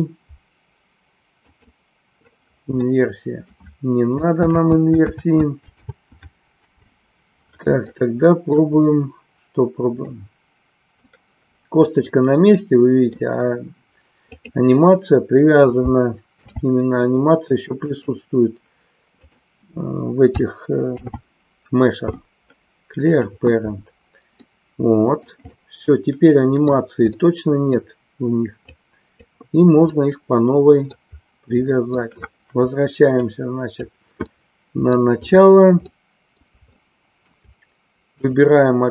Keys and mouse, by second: 3.0 middle click, 8.0 middle click, 10.1-11.1 middle drag, 12.7 middle click, 14.3 click, 19.1 click, 24.5 middle click, 25.6-26.9 middle drag, 27.2 middle click, 28.7 click, 30.0-31.1 middle drag, 31.8 middle click, 33.3 click, 34.3 middle click, 36.0 middle click, 36.8 shift+middle click, 38.2 click.